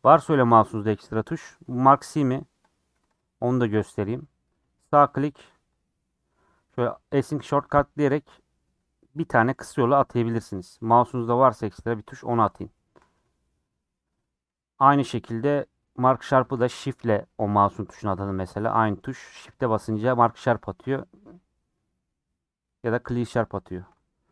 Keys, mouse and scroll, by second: 1.1 middle click, 1.4 scroll up 2, 2.1 middle click, 2.7 click, 3.2 click, 3.4-13.5 right drag, 13.5 scroll down 2, 13.6 middle click, 13.9-14.9 scroll up 2, 14.0 middle click, 14.9-16.3 scroll up 1, 16.3-24.0 scroll up 1, 24.0 scroll down 5, 24.2 middle click.